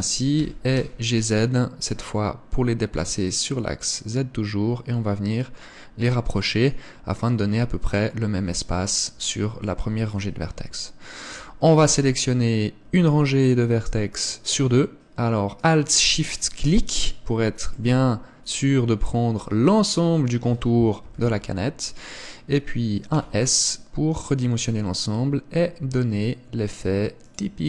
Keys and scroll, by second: 21.1 KP_1.